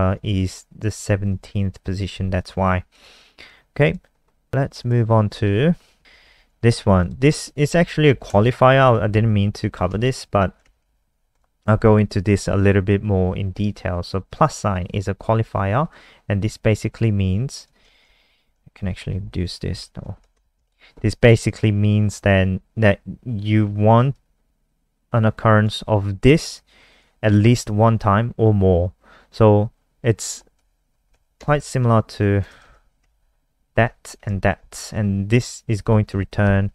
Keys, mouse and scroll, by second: 0.2 click, 1.3 Left, 2.9 click, 4.2 scroll down 1, 4.8 click, 6.0 shift+Home, 6.2 shift+Home, 6.2 shift+Up, 6.3 shift+Up, 9.8 Tab, 10.6 shift+Tab, 10.8 shift+Tab, 11.3 click, 18.2 Right, 18.3 Right, 18.7 ctrl+shift+Left, 18.8 ctrl+shift+Left, 18.9 ctrl+shift+Left, 19.1 ctrl+shift+Left, 19.4 ctrl+shift+Left, 19.6 ctrl+shift+Left, 20.3 BackSpace, 20.5 Down, 24.1 click, 30.6 Right, 30.7 Right, 30.8 Right, 31.1 Left, 31.3-34.2 typing, 34.7 click, 35.8 ctrl+s, 36.1 F5.